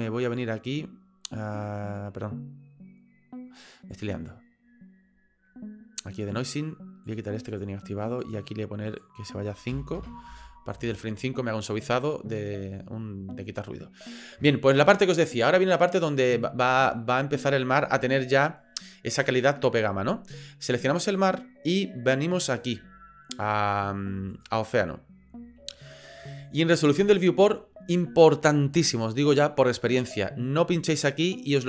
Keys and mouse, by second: 0.3 click, 1.9 click, 4.0 click, 6.2 click, 7.1 click, 7.6 click, 8.2 click, 8.9-10.3 drag, 21.1 right click, 24.3 click.